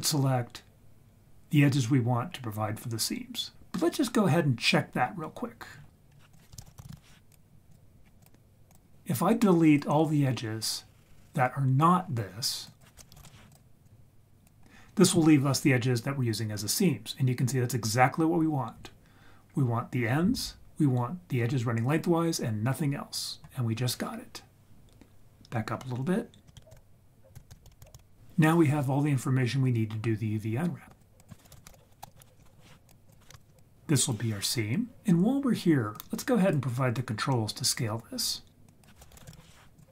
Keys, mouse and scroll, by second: 3.5 ctrl+s, 5.6-6.1 scroll down 4, 6.1 scroll up 2, 6.3 click, 6.6 shift+a, 8.0 scroll up 2, 8.2 click, 9.3 click, 12.6-13.5 drag, 13.8-14.4 drag, 16.4-19.5 scroll down 1, 26.5 ctrl+z, 26.7 ctrl+z, 27.3 ctrl+z, 27.5 ctrl+z, 27.6 ctrl+z, 27.8 ctrl+z, 27.9 ctrl+z, 30.9 click, 31.1-33.1 drag, 33.3 ctrl+right click, 33.6-34.1 drag, 35.9-36.6 drag, 38.6-39.8 drag.